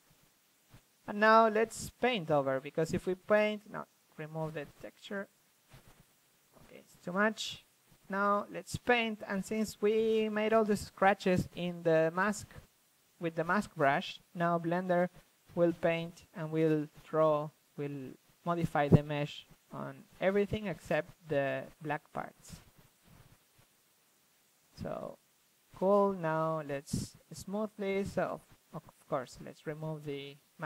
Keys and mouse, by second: 0.2-1.4 drag, 2.6-4.2 drag, 4.3 ctrl+z, 5.1 click, 5.5 f, 8.2 ctrl+z, 8.9 click, 9.0 ctrl+z, 9.1 ctrl+z, 9.3 f, 9.7-10.4 drag, 10.4 shift+f, 10.8-11.4 drag, 11.4 shift+f, 12.2-13.0 drag, 13.2-20.6 middle drag, 20.6 click, 21.0-24.6 middle drag, 24.5 s, 24.6-26.5 drag, 28.1 d, 28.8-30.0 drag, 29.5 f.